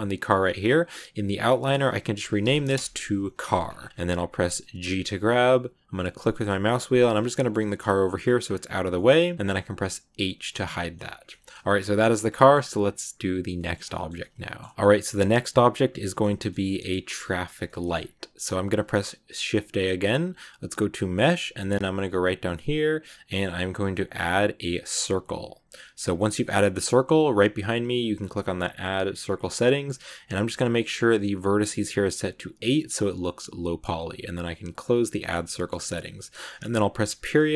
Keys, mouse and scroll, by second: 1.0 click, 1.2-3.4 drag, 3.4 ctrl+s, 3.6-4.8 scroll down 2, 3.7 middle click, 4.8 g, 7.2 shift+middle click, 7.5 g, 8.8 scroll up 1, 8.8-10.0 shift+middle drag, 10.0 h, 10.6 shift+middle click, 10.8-11.2 scroll up 2, 11.2 shift+middle click, 12.0 ctrl+s, 12.2 middle click, 12.4 scroll up 2, 13.1-13.4 scroll up 1, 13.4-17.1 shift+middle drag, 17.1-17.6 scroll up 1, 17.6-18.7 shift+middle drag, 18.7 shift+a, 25.8-27.4 shift+middle drag, 27.4-30.5 drag, 34.7 click, 35.1 middle click, 35.3 shift+scroll up 1, 35.3 shift+middle click, 35.6-37.0 shift+scroll down 3, 37.0 KP_Decimal.